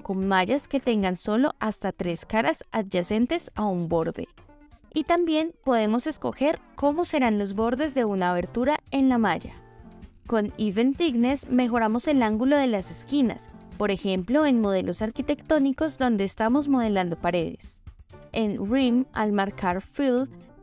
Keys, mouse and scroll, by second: 0.5-3.0 drag, 6.1-7.7 middle drag, 10.7 middle click, 11.6 shift+middle click, 12.5 KP_7, 13.6 shift+middle click, 16.0 click, 17.4 middle click, 18.4 shift+middle click, 19.0 middle click, 20.3 click.